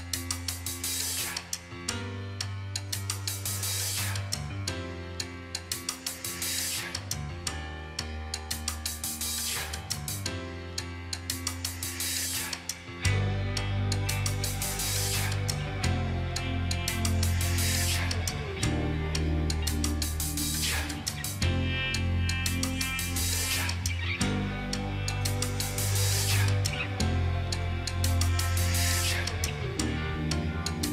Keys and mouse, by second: 3.6 ctrl+j, 10.7 shift+click, 13.3 right click, 20.7 ctrl+j, 24.4 right click.